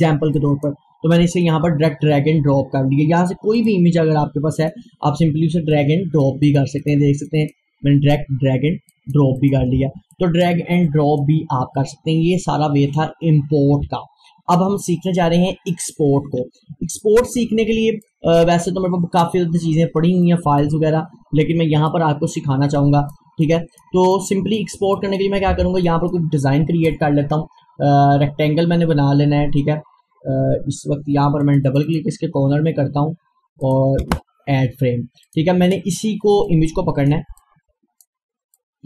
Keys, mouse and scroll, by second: 3.6 click, 7.9-8.2 scroll up 1, 8.9 click, 9.6 Delete, 10.1-13.9 drag, 17.0-25.0 drag, 25.5 Delete, 25.9 click, 31.5 click, 34.0 Return, 35.3 click, 37.4-38.8 drag.